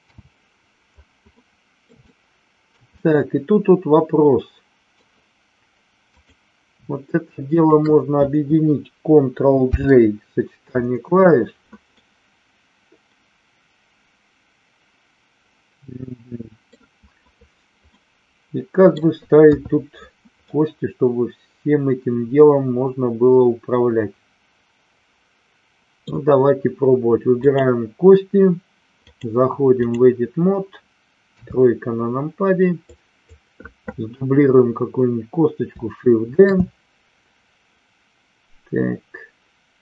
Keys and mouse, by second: 0.0 n, 1.3-1.8 middle drag, 2.0-2.6 shift+middle drag, 2.9-4.9 middle drag, 6.2 click, 7.6 shift+click, 9.6 ctrl+j, 12.0-16.6 middle drag, 17.9-18.9 middle drag, 19.4 KP_3, 20.4-26.0 middle drag, 27.4 click, 29.0-29.9 drag, 31.3 KP_3, 33.0 click, 36.3 shift+d.